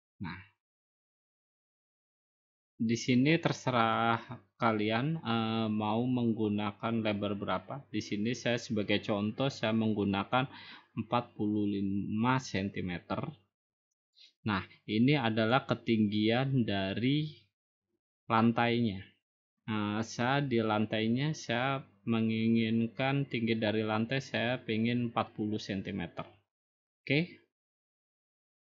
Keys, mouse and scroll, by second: 1.0 click, 2.1 click, 3.1 click, 4.0 click, 11.1 4, 12.2 5, 14.3 click, 15.5-16.5 drag, 24.9 typing.